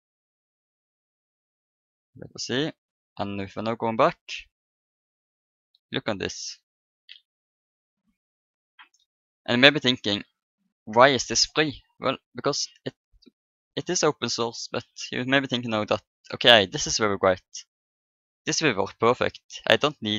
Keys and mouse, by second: 1.8-5.5 drag, 5.6-7.5 middle drag.